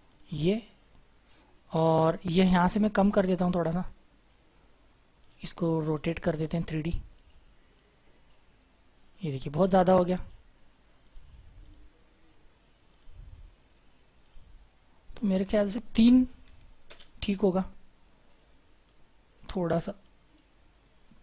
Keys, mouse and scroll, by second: 16.4 typing, 16.9 Return, 18.8-19.1 scroll up 1.